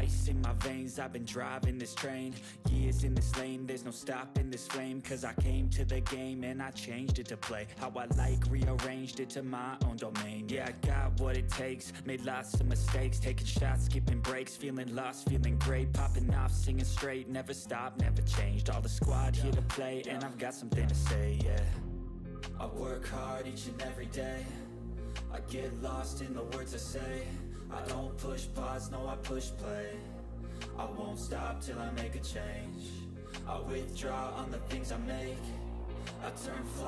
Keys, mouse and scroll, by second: 0.7 click, 0.7 typing, 3.7-4.9 drag, 4.9 ctrl+s, 8.2 ctrl+s, 8.2 click, 8.7-10.5 typing, 11.6-12.9 typing, 15.9 typing, 16.6 click, 20.9 click, 22.7 click, 23.9-25.0 scroll down 1, 25.3 scroll down 1, 25.3 click, 26.7 Return, 26.8-28.3 typing, 28.5 Return, 29.6 Right, 29.9-32.6 typing, 31.4 click, 33.8 click, 34.8-36.8 typing.